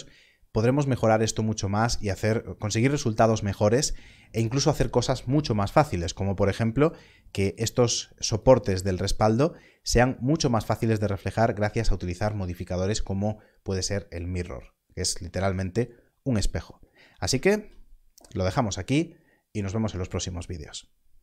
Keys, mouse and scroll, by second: 6.3 click, 17.7-18.6 scroll down 1.